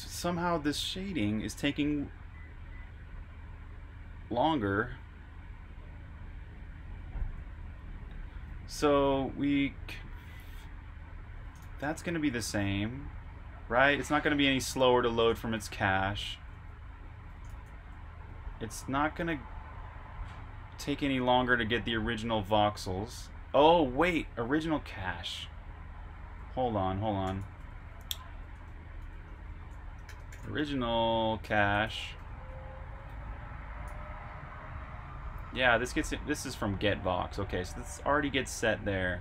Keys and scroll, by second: 2.7-5.2 typing, 6.6-9.1 typing, 10.4-12.5 typing, 13.9-15.3 typing, 16.5-18.1 typing, 20.2-21.7 typing, 23.4-25.3 typing, 35.7-36.8 typing.